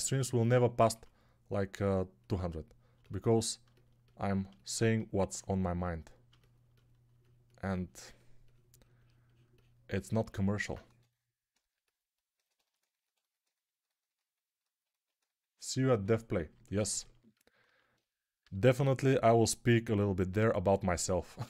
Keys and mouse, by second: 0.6 2, 0.8 2, 10.7 1, 17.6 alt+q, 18.3 g.